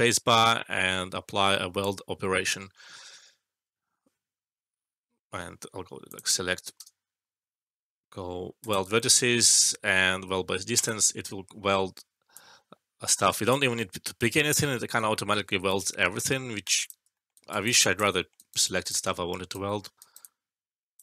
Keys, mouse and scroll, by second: 6.0 click, 6.8 space, 8.6 click, 9.7 alt+middle click, 10.7 click, 12.3-13.5 alt+drag, 15.8 ctrl+z, 16.6 alt+click, 17.1 alt+middle click, 17.3 alt+right click, 17.6-18.9 alt+click, 18.2 alt+middle click, 18.3 alt+right click, 18.6 alt+click, 19.4 right click, 19.5-19.9 right click, 20.1-21.0 alt+click.